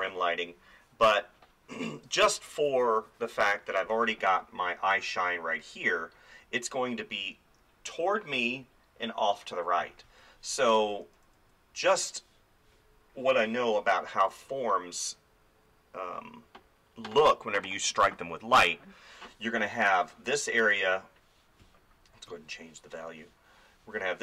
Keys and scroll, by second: 9.8 space, 10.9 [, 11.9 [.